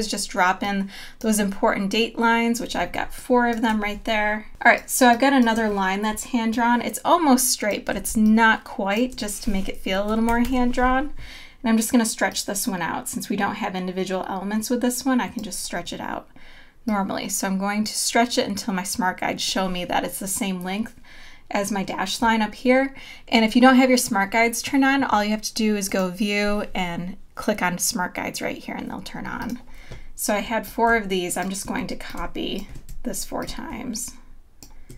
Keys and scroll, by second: 2.8 space, 4.5 space, 8.1 space, 10.9 super+=.